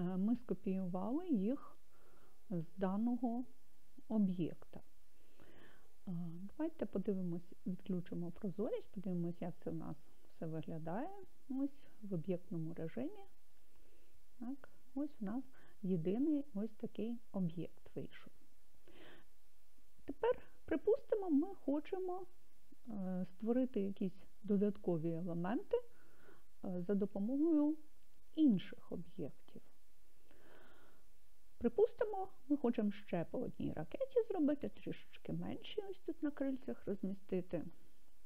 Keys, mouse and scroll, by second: 8.0 click, 9.6 click, 12.8 click, 14.9-22.9 middle drag, 37.5 click.